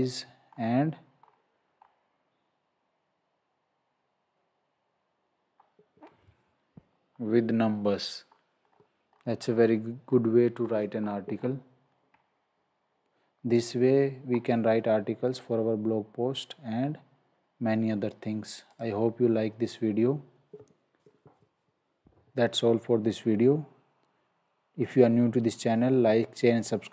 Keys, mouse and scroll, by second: 5.5-5.9 scroll up 1, 13.4 scroll, 15.3 click, 18.7 click.